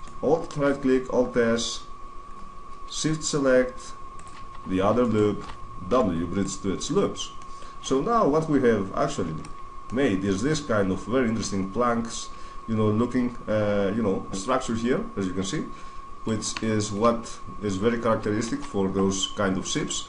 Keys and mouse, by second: 0.4 alt+s, 4.0-5.8 drag, 4.8 right click, 5.6 w, 7.2-9.2 middle drag, 9.2 Tab, 9.6-11.4 middle drag, 14.2 Tab, 14.2 middle click, 15.4 middle click, 17.2-18.4 middle drag, 18.3 Tab, 18.5 middle click, 18.7 middle click, 19.4 right click.